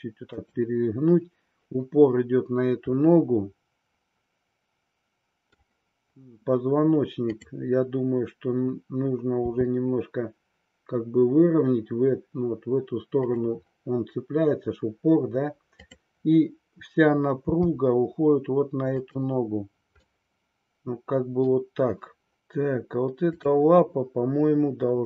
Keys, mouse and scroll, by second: 0.5 click, 3.0-5.5 middle drag, 7.2-8.6 drag, 9.5 r, 13.2 click, 15.7 click, 17.6 g, 19.1 click, 20.0-21.5 middle drag, 20.0 scroll up 1, 22.4 KP_3, 23.2-24.5 drag.